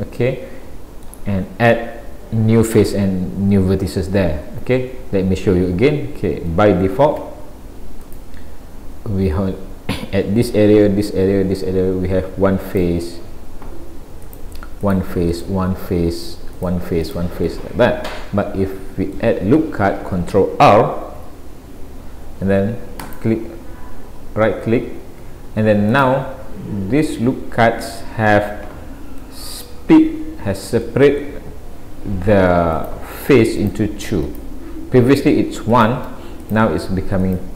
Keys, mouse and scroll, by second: 4.5 ctrl+z, 6.6 a, 8.1 click, 12.7 click, 14.3 click, 14.9 click, 15.3 click, 15.8 middle click, 16.6 click, 17.1 click, 17.5 middle click, 21.1 ctrl+r, 27.0 middle click, 29.2 middle click, 30.3 scroll up 2, 30.9 middle click, 32.8 click, 33.6 click, 34.3 click, 35.1 click, 35.7 shift+click, 35.9 shift+click, 36.4 click, 37.2 click.